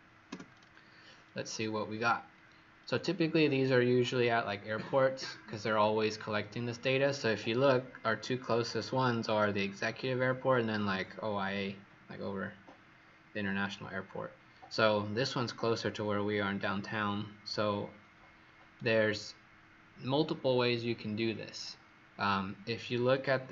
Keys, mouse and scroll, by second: 0.3 Return.